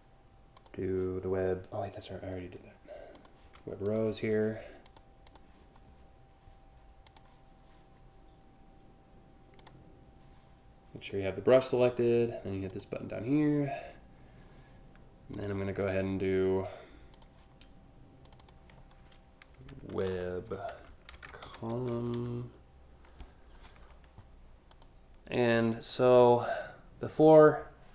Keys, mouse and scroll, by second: 0.2 click, 2.7 click, 3.4 click, 4.5 click, 4.9 click, 6.7 click, 9.2 click, 12.3 click, 15.0 click, 16.8 click, 17.9 click, 18.0 click, 19.6-22.3 typing, 24.3 click.